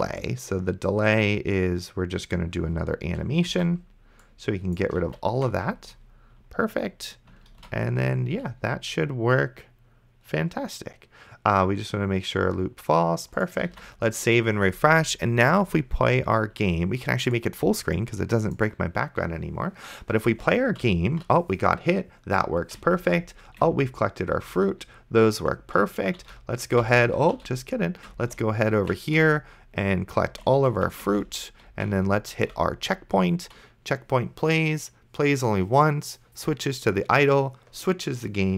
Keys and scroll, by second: 3.8 ctrl+x, 5.3 ctrl+v, 7.8 ctrl+s, 14.0 ctrl+s, 19.5 d, 20.5 space, 20.8 a, 22.4 d, 23.1 space, 24.8-28.9 typing, 30.2 d, 30.5 space, 31.1 space, 31.7 d.